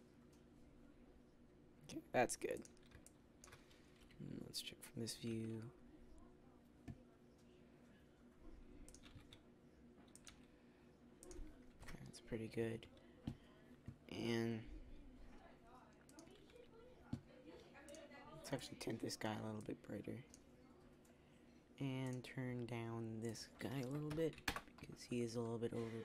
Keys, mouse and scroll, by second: 3.0 click, 3.9 KP_3, 5.2 r, 9.0 click, 9.0 g, 10.2 r, 11.6 KP_0, 12.5 z, 12.6 z, 16.1-25.2 right drag.